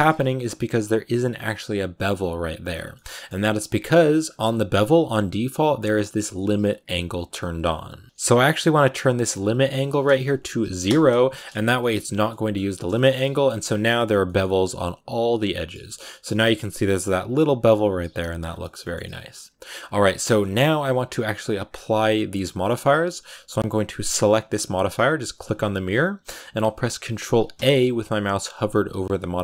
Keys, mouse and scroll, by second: 0.0-2.6 scroll up 2, 2.6 scroll down 3, 2.8-8.0 shift+middle drag, 8.0-12.2 drag, 12.2 middle click, 12.4 scroll down 1, 12.6 shift+middle click, 13.0-13.8 scroll up 4, 13.1 middle click, 14.0 scroll down 3, 14.1 middle click, 15.1 scroll down 1, 15.3 middle click, 15.9-18.3 scroll up 3, 15.9 middle click, 18.3 scroll down 7, 18.5-19.5 shift+middle drag, 19.5-20.3 scroll up 3, 19.9 right click, 20.1 middle click, 24.0-27.4 drag, 27.4 ctrl+a.